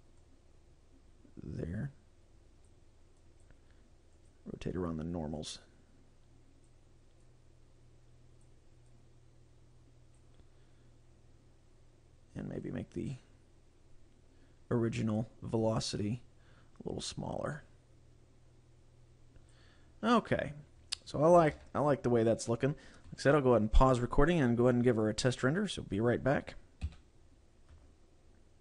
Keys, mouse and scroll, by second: 0.3 click, 3.3 click, 5.6 click, 7.4 click, 9.0 click, 10.5-10.9 scroll down 2, 11.4 scroll up 3, 12.7 click, 16.0 click, 20.0-20.7 scroll up 1, 20.7 scroll up 3, 21.6 ctrl+s.